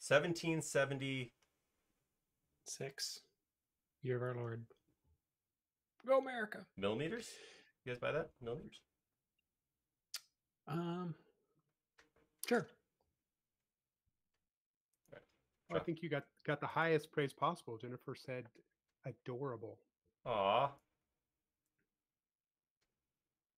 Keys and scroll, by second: 17.4 l.